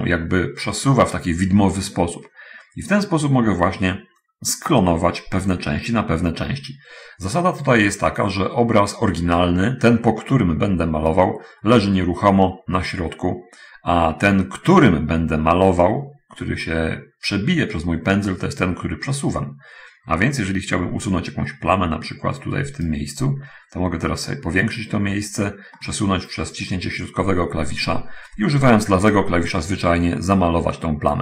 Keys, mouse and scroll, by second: 10.5-14.4 middle drag, 16.3-23.5 right drag, 24.1-24.7 scroll up 1, 24.7-25.3 scroll up 1, 25.7-28.0 middle drag, 29.5-31.2 drag.